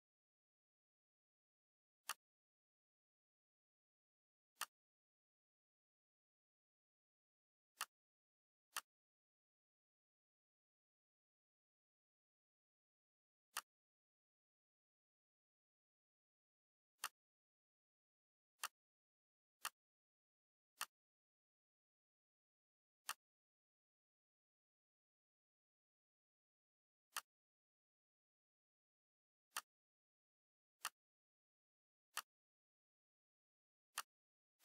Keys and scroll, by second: 11.7 ctrl+shift+c, 15.4 ctrl+shift+v.